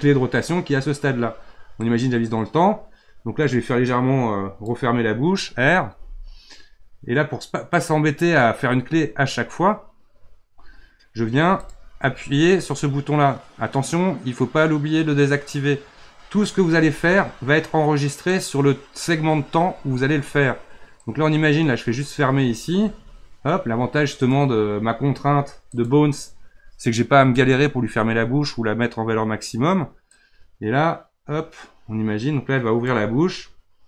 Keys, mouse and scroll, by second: 1.8-4.8 drag, 5.9 r, 11.6 click, 16.9 r, 21.0-22.7 drag, 22.7 r, 25.7 click, 30.1-33.1 drag.